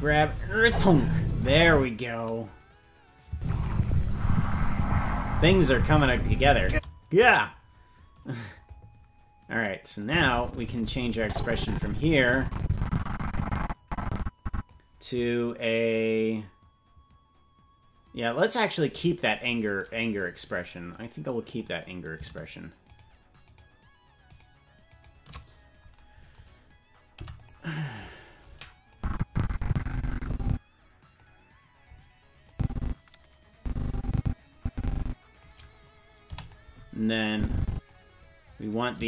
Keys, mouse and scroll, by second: 1.7 space, 3.3 space, 6.7 space, 10.0-14.7 drag, 21.5 click, 23.1 shift+right click, 24.0 shift+right click, 26.0 shift+right click, 27.1 i, 28.9-31.2 drag, 32.5-35.5 drag, 36.3 i, 37.3 click, 38.9 right click.